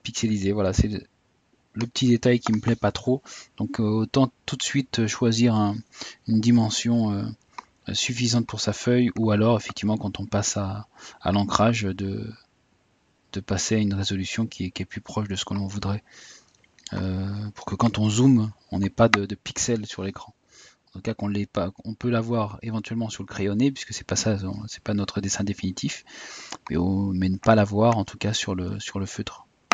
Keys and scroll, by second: 2.7 typing.